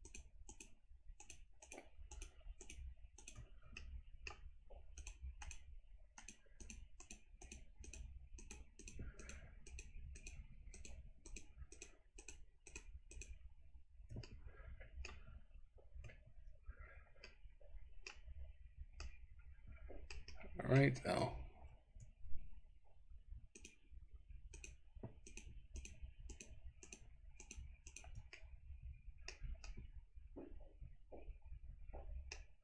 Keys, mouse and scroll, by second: 0.2 shift+click, 1.3 shift+click, 1.7 shift+click, 2.2 shift+click, 2.7 shift+click, 3.3 shift+click, 3.9 shift+middle click, 5.0 shift+click, 5.6 shift+click, 6.2 shift+click, 6.7 shift+click, 7.1 shift+click, 7.9 shift+click, 8.5 shift+click, 8.9 shift+click, 9.4 shift+click, 10.3 shift+click, 10.9 shift+click, 11.8 shift+click, 12.2 shift+click, 12.7 shift+click, 13.2 shift+click, 14.3 middle click, 17.2 middle click, 19.1-20.2 middle drag, 20.4 middle click, 21.1-21.8 scroll up 2, 22.3-23.4 scroll down 1, 23.6 shift+click, 24.5 shift+click, 25.3 shift+click, 25.8 shift+click, 26.4 shift+click, 26.9 shift+click, 27.5 shift+click, 28.0 shift+click, 28.5 middle click, 29.7-32.4 middle drag.